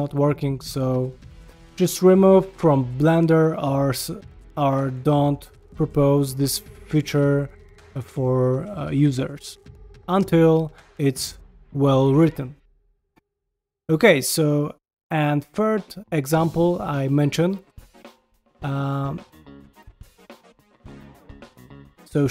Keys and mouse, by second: 0.6 Tab, 1.2 shift+middle click, 6.2 r, 7.1 g, 7.8 ctrl+middle drag, 8.1-8.4 middle drag, 8.6 shift+middle click, 8.9 g, 12.7 g, 13.3 ctrl+middle click, 13.5 shift+middle drag, 14.1 ctrl+shift+middle drag, 14.6-15.0 middle drag, 15.1 shift+middle drag, 15.5 shift+right click, 15.7 shift+a, 17.0 g, 17.6 s, 18.9 shift+s, 20.3 d, 21.1 g, 22.0 shift+d.